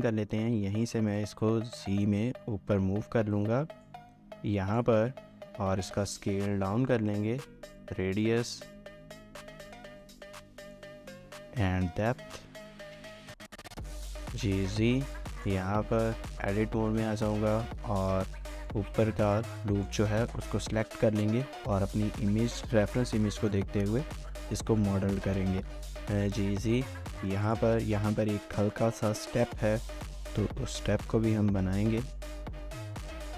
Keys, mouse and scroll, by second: 1.2 shift+click, 13.4 scroll up 1, 13.8 shift+middle click, 14.3 typing, 15.3-16.7 typing, 15.7 scroll up 1, 15.8 Tab, 16.4 shift+middle click, 17.8-18.5 typing, 25.2-26.2 typing, 27.8 shift+middle click, 28.1 scroll up 1, 28.4 shift+middle click, 29.4 alt+click, 30.1 typing, 32.0 typing.